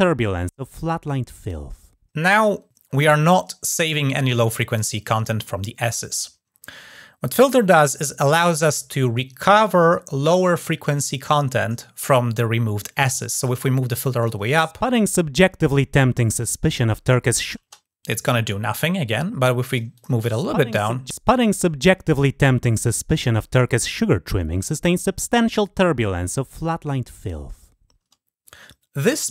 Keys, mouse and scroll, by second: 13.2-13.7 drag, 14.0 click, 19.0 click, 19.7 click.